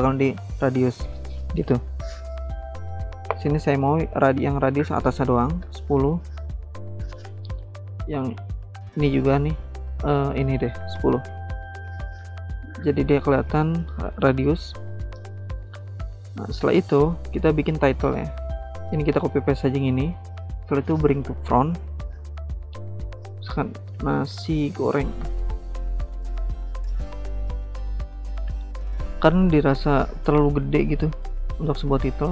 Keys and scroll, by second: 5.3-6.1 typing, 10.8 typing, 11.5 Return, 15.7-16.5 typing, 17.9 ctrl+c, 18.1 ctrl+v, 23.7-26.9 typing.